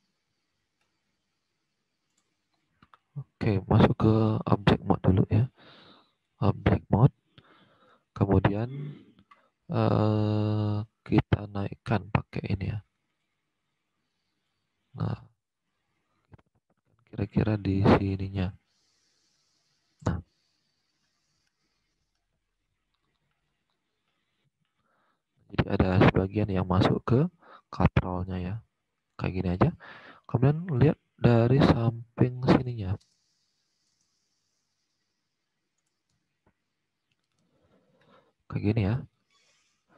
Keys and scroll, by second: 33.8 space, 36.0 space.